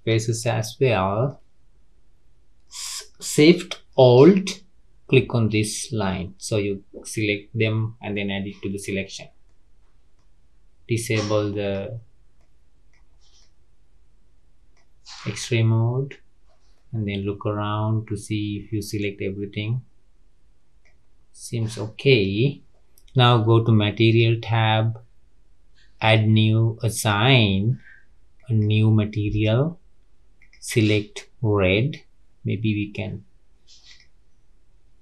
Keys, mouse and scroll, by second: 0.4-1.6 shift+middle drag, 1.6 scroll up 3, 5.6 alt+shift+click, 6.6-8.1 scroll down 3, 8.1 middle click, 9.0-9.4 scroll down 4, 9.4-11.6 middle drag, 11.6-12.3 drag, 12.3 middle click, 13.1 scroll down 3, 13.3-15.0 middle drag, 15.0-16.7 scroll up 4, 16.7-19.7 middle drag, 21.0 scroll down 2, 24.1 click, 26.0-30.5 drag, 33.8 click.